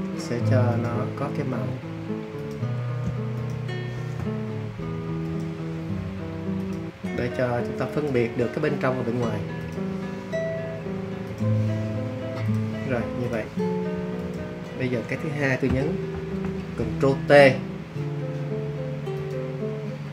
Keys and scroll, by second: 16.1 super+t.